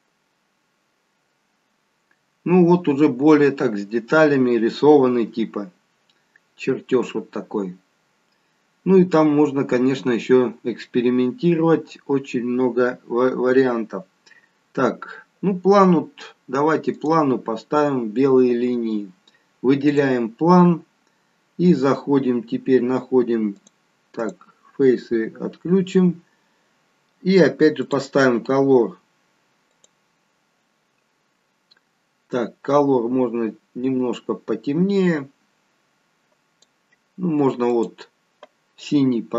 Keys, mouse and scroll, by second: 20.0 click, 21.6-23.0 scroll down 4, 23.0-23.6 scroll down 1, 23.6 click, 24.7 click, 27.9 click, 29.8 click.